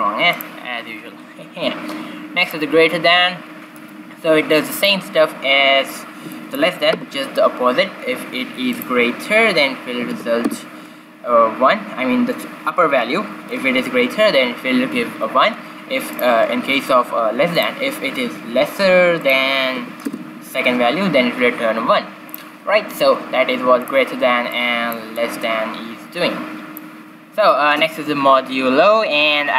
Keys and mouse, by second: 0.2-2.2 drag, 2.4-4.1 drag, 8.7-10.6 drag, 16.1-17.9 drag, 19.2-20.9 drag, 22.3-24.1 drag, 24.5-26.9 drag, 27.0 click, 27.3-29.3 drag.